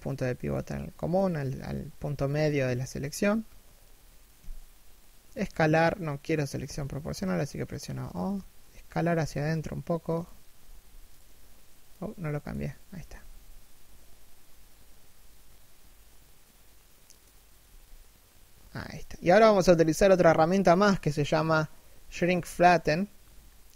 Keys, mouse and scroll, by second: 3.9 s, 12.7 s.